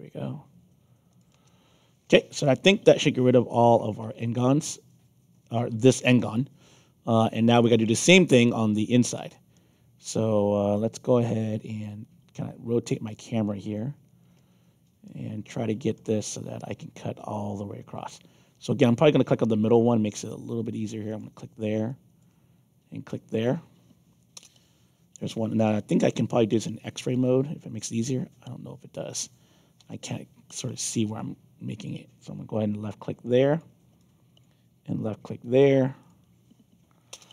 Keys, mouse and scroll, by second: 1.0 click, 1.3 Return, 3.4-5.5 alt+drag, 6.6-8.2 alt+drag, 8.6 alt+middle click, 10.3 middle click, 10.7-13.3 alt+drag, 14.3 alt+middle click, 15.5 alt+middle click, 16.2-20.0 alt+drag, 21.0 click, 21.8 alt+click, 23.3 click, 24.3 Return, 26.6 4, 29.7 6, 31.1 alt+click, 33.5 click, 33.9 alt+click, 36.0 click, 37.1 Return.